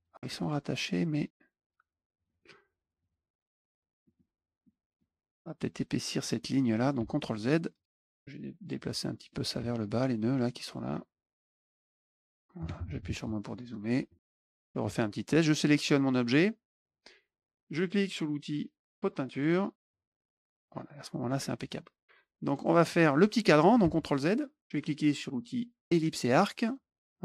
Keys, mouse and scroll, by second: 0.3 click, 2.1 click, 2.2 click, 2.9 click, 4.0 middle click, 4.6 middle click, 6.2 click, 7.3 click, 7.7 click, 8.0 middle click, 8.0 scroll up 2, 8.0 middle click, 8.1 click, 8.9 middle click, 9.5 middle click, 11.4 click, 11.6 middle click, 12.0 click, 12.2 click, 13.7 click, 14.1 middle click, 14.2 middle click, 14.2 click, 14.3 click, 14.3 click, 14.5 middle click, 15.4 click, 19.2 click, 19.8 click, 22.4 click, 23.7 ctrl+z, 26.1 click.